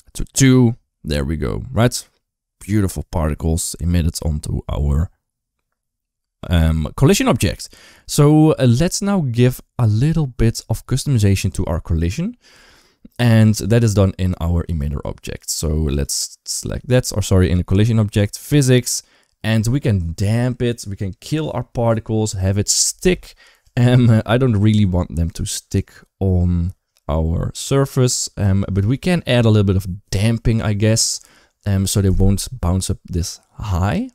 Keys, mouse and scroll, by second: 6.0 space, 13.6 click, 15.7 click, 17.5 click.